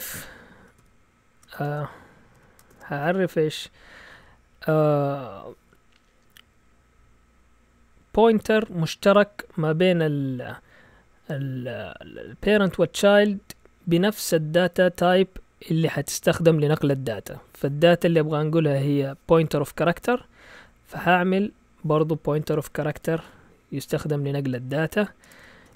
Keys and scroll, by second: 0.8 0, 1.6 BackSpace, 2.4 Escape, 2.7 typing, 22.6-23.7 typing, 25.2-25.7 typing.